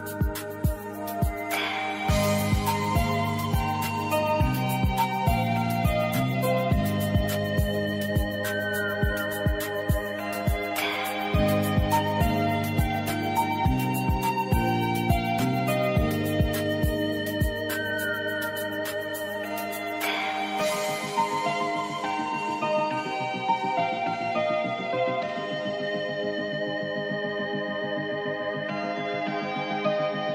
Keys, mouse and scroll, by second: 1.2 0, 2.8 click, 9.1 click, 11.1-12.6 drag, 18.0 click, 21.7 click, 25.1 click, 28.3 click.